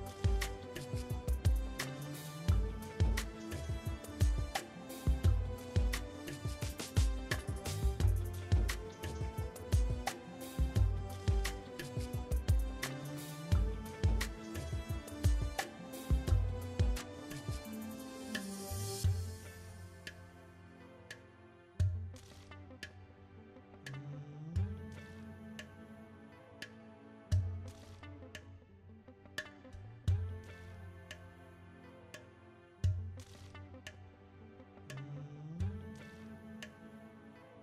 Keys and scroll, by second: 7.0 KP_7, 11.7 shift+a, 13.9 ctrl+z, 14.7 shift+a, 18.9 Tab, 19.7 s, 32.6 r, 33.3 s, 36.9 Tab.